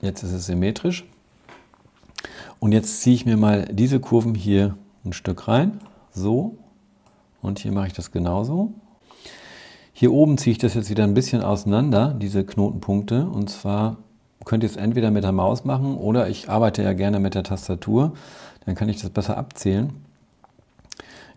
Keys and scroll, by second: 21.2 shift+Right.